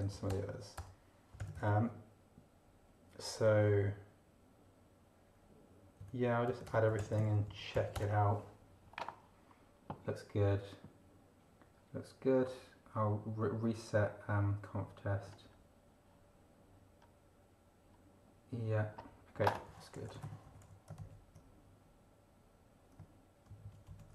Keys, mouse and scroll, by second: 0.0-2.0 typing, 6.0-7.7 typing, 6.4 Tab, 7.9 Return, 15.2 scroll down 2, 16.9 scroll down 2, 17.8-18.1 scroll down 2, 18.3-19.6 scroll down 2, 19.4-21.1 typing, 19.6 scroll down 1, 23.5 ctrl+Right.